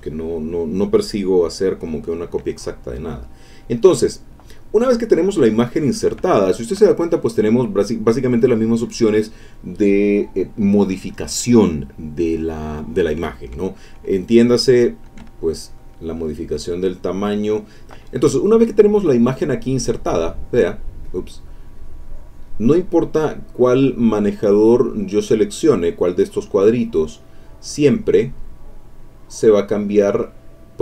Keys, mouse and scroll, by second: 2.9-4.1 drag, 4.9 click, 14.9-17.8 shift+drag, 19.8-20.9 drag, 21.0 click, 21.5-22.6 drag, 23.4-25.8 drag, 27.1-30.4 drag.